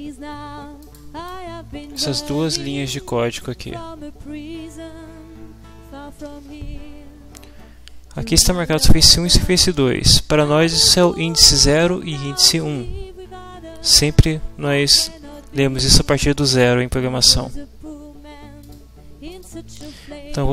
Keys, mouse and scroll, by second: 0.8 click, 1.3 click, 18.6 middle click, 18.7 click, 19.3 click.